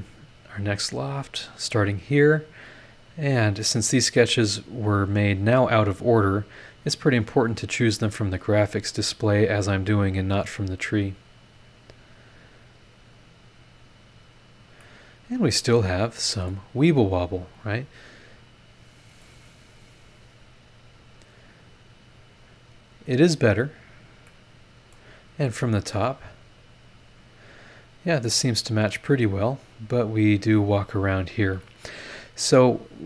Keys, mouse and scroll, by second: 1.0 click, 1.7 click, 3.1 click, 4.1 click, 5.2 click, 6.4 click, 7.7 click, 8.9 click, 10.1 click, 11.4 click, 12.6 click, 13.9 click, 14.8-16.7 middle drag, 15.6-16.7 drag, 15.6-16.7 right drag, 19.2 click, 19.9 scroll up 2, 23.4-24.1 scroll down 3, 24.3 click, 24.3 right click, 26.0 click, 26.5 scroll down 2, 27.2-27.5 scroll up 2, 29.0 scroll down 2, 29.7 scroll up 2, 32.0 scroll down 2.